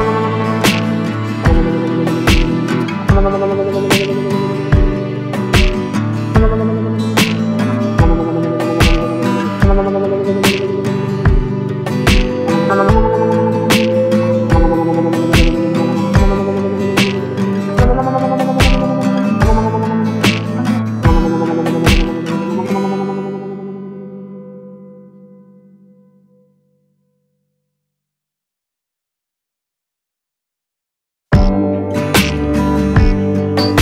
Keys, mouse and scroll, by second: 0.0-13.2 drag, 13.2 click, 16.5 ctrl+space, 20.2-28.2 drag, 28.5-33.8 drag.